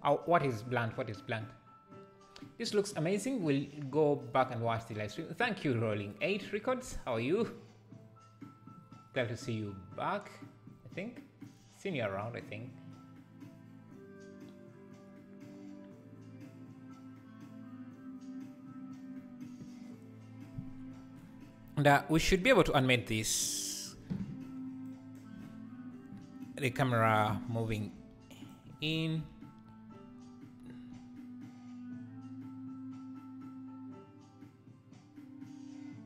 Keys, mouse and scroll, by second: 22.5 Left, 24.9 shift+Right, 24.9-27.9 right drag, 27.9 g, 30.6 r.